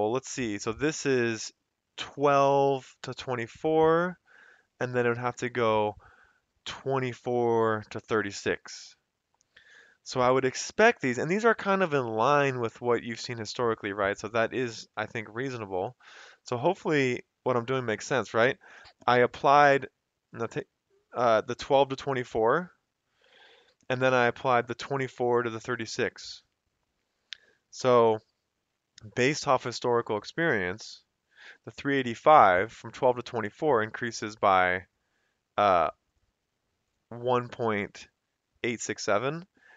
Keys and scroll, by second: 5.3 *, 8.1 Return, 15.5 F2, 18.6 Escape, 27.5 F2, 28.6 Escape, 37.2 F2, 37.7 Escape.